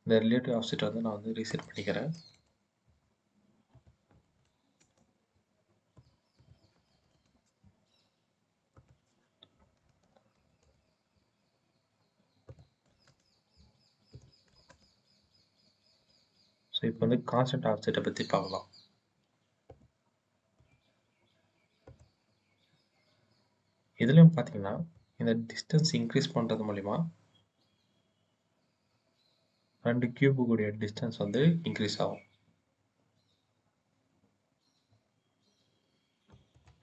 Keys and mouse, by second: 1.4 click, 3.6-4.7 drag, 5.8 click, 6.3 click, 8.6-10.5 drag, 12.5 click, 14.1 click, 19.6 click, 20.5 click, 21.7 click, 24.8-36.3 drag, 36.4-36.8 drag.